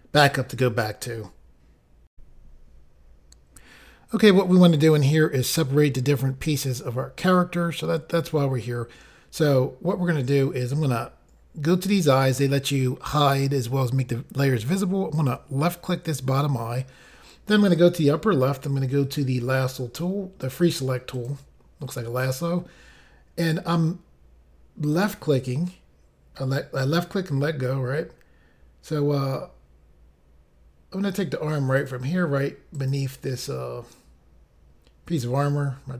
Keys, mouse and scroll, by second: 2.1 Pause, 15.1 click, 21.1 click, 24.9 click, 31.8 click, 32.7 click.